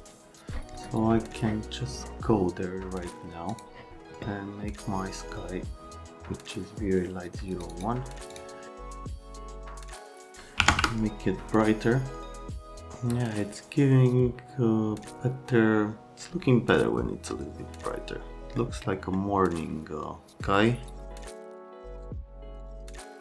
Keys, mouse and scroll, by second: 3.5 click, 7.5 click, 7.7 click, 8.3 click, 8.7 click, 9.4 click, 10.6 KP_1, 10.7 KP_Enter, 18.5 middle click, 21.0 click, 21.2 click, 21.3 click.